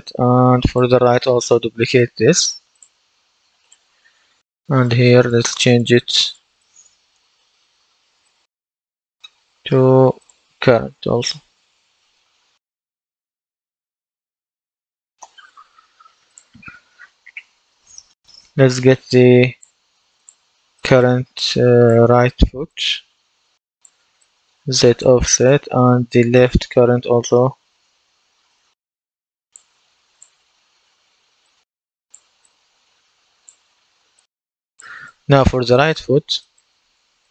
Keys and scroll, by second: 7.1 Right, 8.3 BackSpace, 10.5 BackSpace, 12.7-14.8 typing, 15.1 Return.